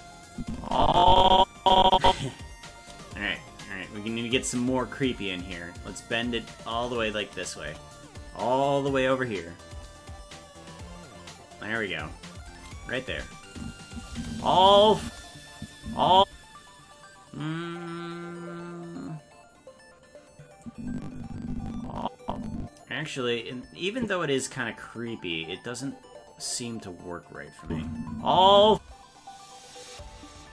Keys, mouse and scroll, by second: 0.3-2.3 drag, 4.5-6.9 drag, 7.6 KP_0, 9.6-12.5 drag, 13.5 click, 13.9 click, 14.1 space, 15.6 click, 15.6 space, 15.8 space, 20.6-23.1 drag, 24.0 click, 27.6 space.